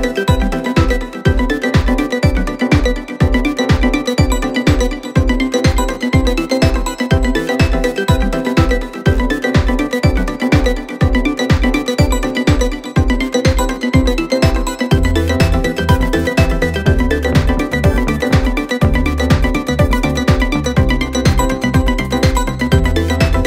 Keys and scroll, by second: 13.6 3, 17.8 4, 21.9 ctrl+d, 22.0 Escape.